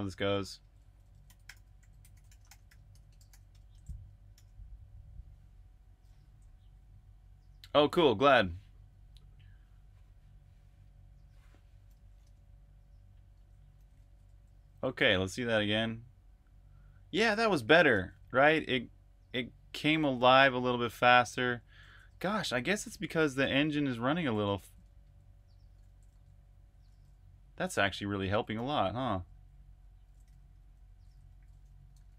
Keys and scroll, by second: 0.0-5.3 typing, 12.1 super+Tab, 13.3 super+Tab, 13.4-15.1 typing, 16.9-17.9 typing, 19.6-29.6 typing, 30.9-32.1 typing.